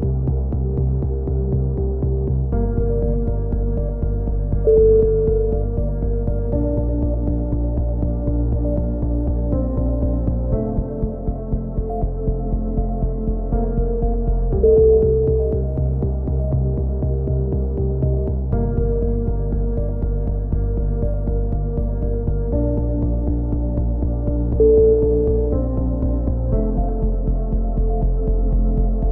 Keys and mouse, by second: 0.3 click, 0.4 z, 0.5 click, 1.5 KP_7, 1.7 z, 1.8 click, 4.7 z, 4.9-6.6 drag, 5.9 right click, 6.6 e, 6.8 z, 7.2 click, 7.9 a, 8.2 KP_3, 8.7 ctrl+z, 8.9 s, 9.6-10.7 drag, 10.0 a, 10.1 z, 10.8 right click, 10.9 click, 11.4 a, 11.5 click, 13.3-14.3 drag, 13.7 right click, 14.7 right click, 14.8 f, 14.9 a, 15.0 click, 19.2 click, 19.8-24.2 typing, 20.9-22.3 drag, 22.0 middle click, 22.3 right click, 22.8 click, 23.6 right click, 24.2 click, 24.4 right click, 26.9 KP_7, 27.2 z, 29.0 a.